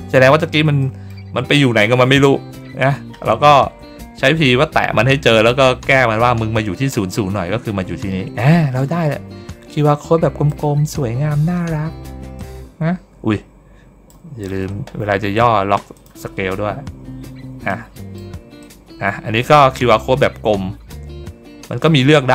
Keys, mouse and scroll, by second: 0.7 middle click, 2.7 ctrl+middle click, 7.2 ctrl+middle click, 7.6 ctrl+middle click, 8.7-10.4 drag, 10.7 ctrl+middle click, 10.7 ctrl+scroll down 1, 12.3-14.0 drag, 15.8 click, 17.6 click, 18.5-21.7 drag, 22.0 ctrl+middle click.